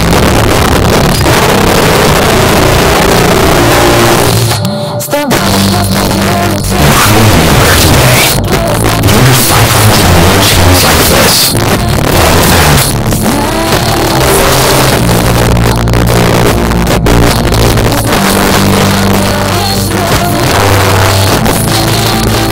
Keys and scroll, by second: 0.5 Down, 0.7 Down, 0.8 Down, 1.0 Down, 1.2 Down, 1.5 Down, 1.7 Down, 1.8 Down, 2.0 Down, 2.4 Down, 2.5 Return, 12.8 Page_Down.